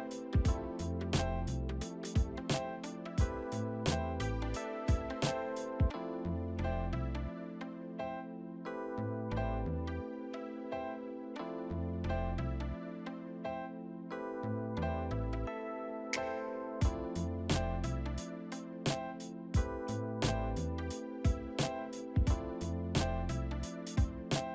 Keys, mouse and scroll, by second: 0.1 t, 1.0 z, 1.9 double click, 2.5 middle click, 3.1 middle click, 4.4 1, 8.7 Return, 8.9 alt+w, 13.9 right click, 15.6 e, 22.9 middle click, 22.9 middle click.